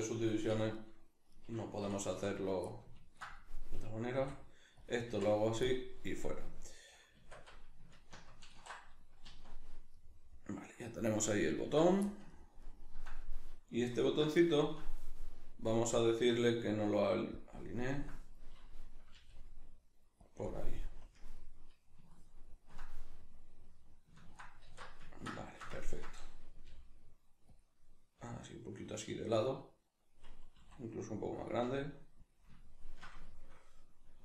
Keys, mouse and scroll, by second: 0.5 4, 0.7 right click, 1.8 4, 2.1 3, 2.3 right click, 2.7-4.9 ctrl+middle drag, 4.1 i, 4.9 click, 5.1 x, 5.9-15.7 middle drag, 7.1 Tab, 8.5 ctrl+2, 9.2 z, 14.1 alt+q, 15.7-20.3 drag, 19.2 g, 21.0 KP_Decimal, 21.4-27.6 middle drag, 24.7 alt+q, 26.7 g, 27.6 click, 28.2 g, 29.5-30.6 middle drag, 29.5 click, 30.6 s, 31.5 click, 31.6 g, 32.3 click, 32.6 ctrl+middle click, 33.3-34.2 shift+middle drag.